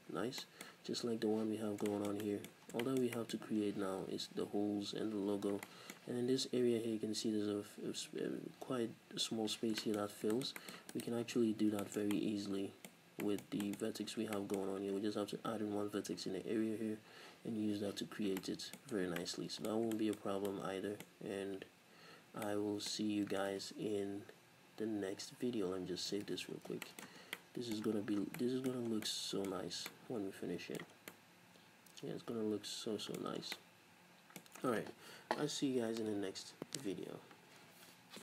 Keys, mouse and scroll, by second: 1.6-1.9 scroll down 2, 2.7 scroll up 2, 4.3-11.0 middle drag, 5.4 scroll up 2, 10.0 scroll up 2, 11.0 right click, 11.4 Tab, 11.5 scroll up 1, 11.8-34.4 shift+middle drag, 14.1 scroll down 1, 14.9 scroll up 1, 19.0 scroll down 1, 22.2 scroll down 1, 23.0-24.2 scroll up 2, 24.2-25.7 scroll up 1, 25.7 ctrl+s, 26.4 s, 26.6 scroll down 2, 27.3 Tab, 28.0-28.4 scroll up 2, 28.9 scroll down 2, 29.5 a, 31.0 scroll down 2, 33.3 scroll up 2.